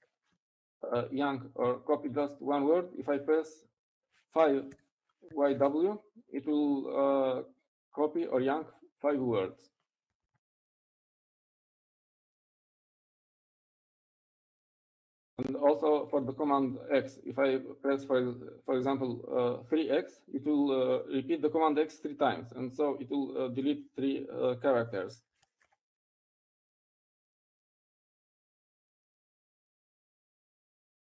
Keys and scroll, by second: 4.0-4.8 typing, 8.4-9.1 typing, 20.3 Right, 20.3 Left, 27.9-28.4 typing, 30.8 typing.